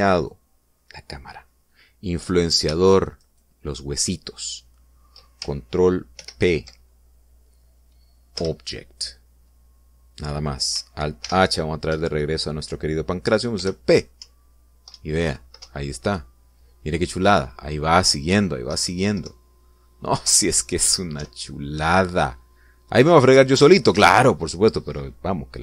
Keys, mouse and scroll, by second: 0.9 right click, 4.0 shift+right click, 6.9 ctrl+p, 9.2 Return, 12.0 alt+h, 14.3 p, 15.0 Up, 15.7 Right, 16.4 Up, 19.5 Left, 22.0 Up, 24.7 Escape.